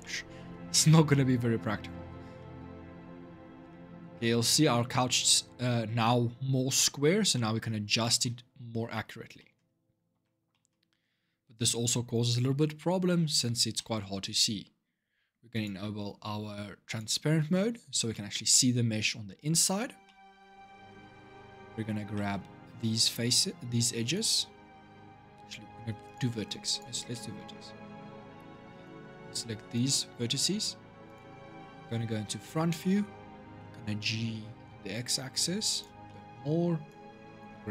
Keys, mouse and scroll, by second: 3.1 Tab, 3.5-9.9 middle drag, 9.9 Tab, 10.3-13.3 middle drag, 13.5-15.3 middle drag, 15.3 click, 16.6 click, 17.5-17.9 scroll up 1, 17.9-22.7 middle drag, 22.7 click, 25.8 click, 26.9-28.6 middle drag, 28.6 click, 30.8 click, 31.5 scroll up 2, 32.0-33.3 shift+middle drag, 33.3 g, 35.8 shift+middle click, 36.7 click.